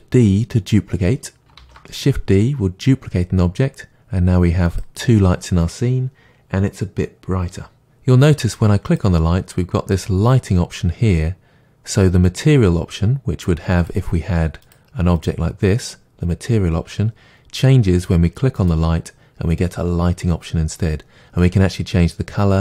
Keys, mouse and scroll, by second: 1.6 shift+d, 4.8 click.